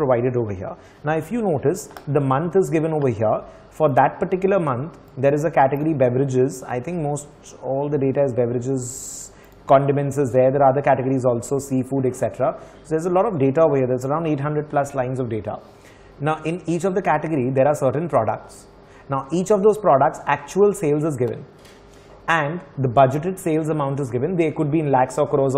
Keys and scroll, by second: 0.0-0.7 typing, 10.7 ctrl+Down, 13.0 ctrl+Down, 13.6 typing, 14.5 ctrl+Up, 15.0 r.